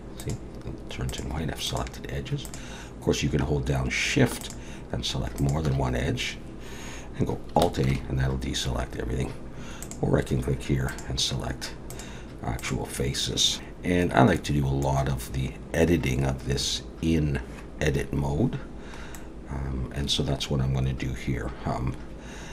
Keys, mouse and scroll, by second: 0.2 click, 1.7 click, 2.4 click, 4.4 shift+click, 5.4 shift+click, 7.9 alt+a, 9.8 click, 10.9 click, 11.9 click, 12.6 click, 13.5 middle click, 13.5 a, 19.2 middle click.